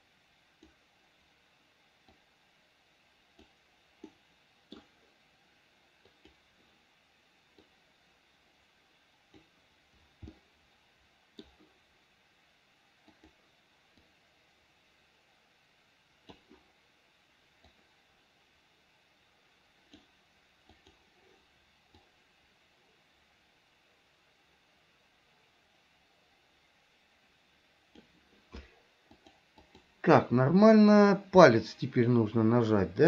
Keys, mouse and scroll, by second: 2.3-3.7 drag, 4.4 middle click, 6.4 click, 8.0-9.7 drag, 10.5-11.7 middle drag, 13.4 click, 14.3-16.6 drag, 17.9-20.2 drag, 21.0 click, 22.2-28.3 drag, 29.3 click, 31.7-33.0 middle drag.